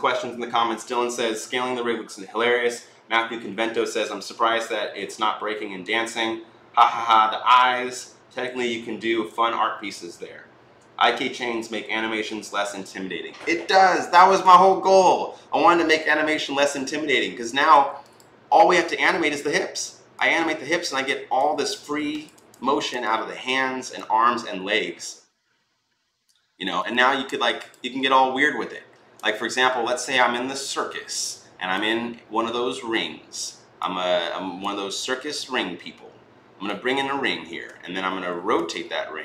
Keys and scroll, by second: 37.3-38.2 typing.